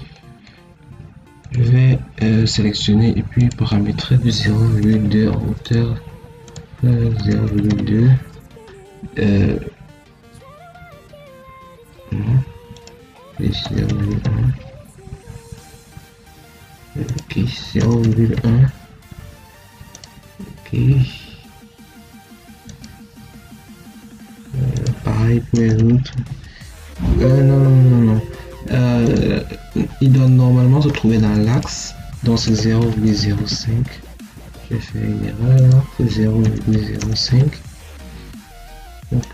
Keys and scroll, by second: 4.2 0, 4.5 ., 4.8 2, 7.0 0, 7.3 ., 7.6 2, 13.5 0, 13.8 ., 14.0 1, 17.6 0, 17.9 ., 18.2 1, 26.4 0, 32.3 0, 32.7 ., 32.9 0, 36.3 0, 36.6 ., 36.9 0.